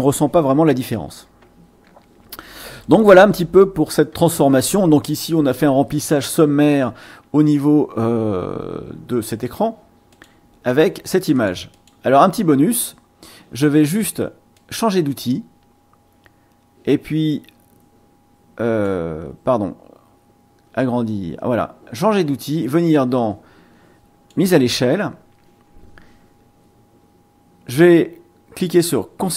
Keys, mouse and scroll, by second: 2.8 click, 7.7 ctrl+scroll down 2, 10.1 click, 10.7 click, 11.3 click, 11.7 click, 14.5-19.0 drag, 22.0-24.5 drag.